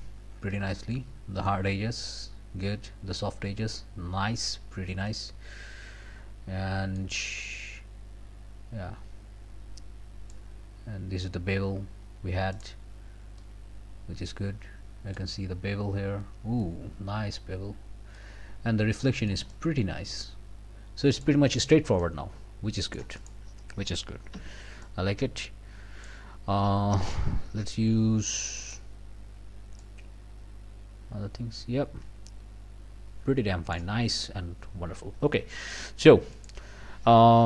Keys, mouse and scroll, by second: 0.5-1.7 drag, 3.7-4.2 scroll down 1, 4.4 scroll up 1, 5.1-6.5 middle drag, 6.5 scroll up 2, 7.5-10.5 drag, 12.5 click, 13.4-15.3 drag, 15.9 scroll up 1, 17.6-17.9 scroll down 1, 18.2-21.4 drag, 21.4 scroll down 2, 22.0-23.1 middle drag, 23.2 click, 24.3 f, 24.8-26.2 drag, 28.6 click, 29.8-33.9 drag, 36.3 click.